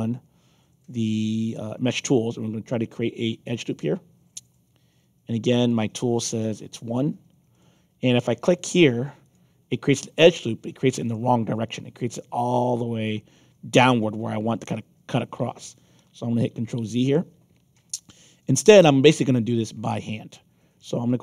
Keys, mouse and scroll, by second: 5.5 click, 7.5 click, 9.2 click, 16.0 ctrl+z, 16.7-20.0 alt+drag.